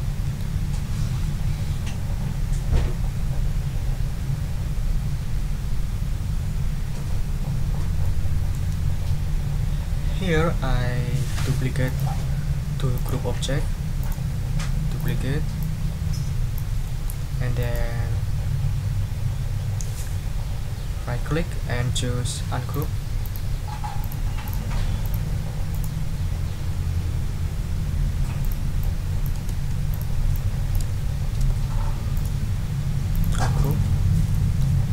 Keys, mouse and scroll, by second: 6.8 ctrl+scroll down 2, 8.0 ctrl+click, 11.8 click, 12.9 shift+click, 14.0 right click, 15.0 click, 15.6-16.7 drag, 16.8 middle click, 16.9 click, 17.6 click, 22.7 click, 23.2 click, 24.0 click, 24.4 click, 25.0 click, 25.7 right click, 28.4 click, 28.8 click, 29.5 ctrl+z, 29.9 ctrl+click, 30.3 ctrl+click, 30.9 ctrl+z, 32.1 ctrl+shift+right click, 33.1 click, 33.6 click, 34.3 middle click.